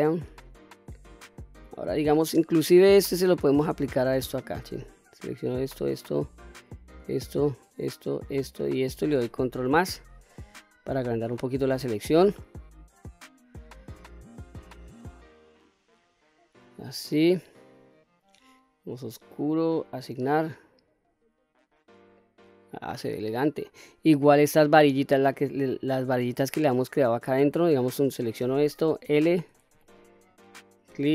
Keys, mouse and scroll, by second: 0.7-1.1 scroll up 2, 1.2-1.6 shift+middle drag, 2.9 click, 3.8 shift+click, 4.7 shift+click, 5.3 shift+click, 6.1 shift+click, 7.1 shift+click, 7.9 shift+click, 8.5 shift+click, 10.2 ctrl+KP_Add, 12.2 middle click, 13.2 scroll up 1, 13.6-15.3 middle drag, 16.7 middle click, 19.1 click, 19.9 click, 20.7-21.3 scroll down 2, 21.3 click, 22.0 middle click, 23.0-23.7 scroll up 1, 23.7 middle click, 24.3-25.5 scroll up 1, 25.5 middle click, 26.6-27.1 shift+middle drag, 27.6 click, 28.9 l, 30.2 shift+click.